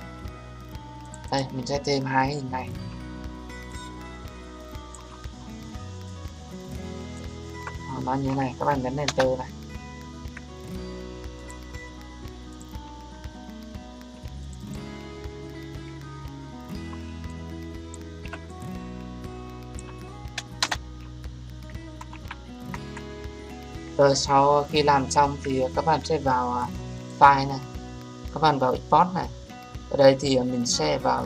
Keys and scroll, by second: 9.0 Return, 20.6 Return.